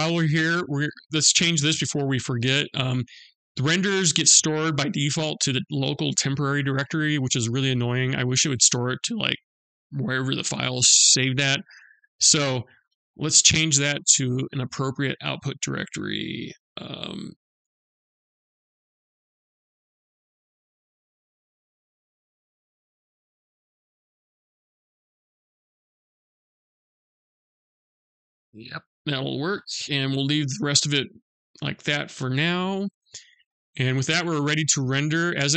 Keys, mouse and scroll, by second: 11.9 click, 28.8-29.3 scroll down 2, 29.3-29.8 scroll up 1, 29.8-30.1 scroll down 1, 30.1-33.0 scroll up 1, 33.2 click, 34.9 click.